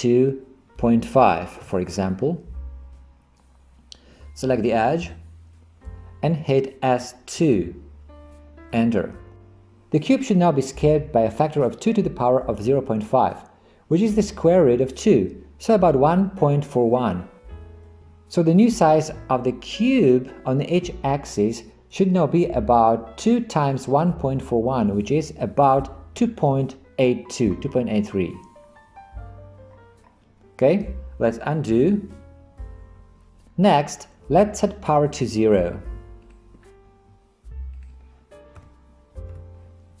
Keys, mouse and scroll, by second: 7.0 s, 19.9 click, 32.0 ctrl+z, 32.8 ctrl+z, 37.8-40.0 drag.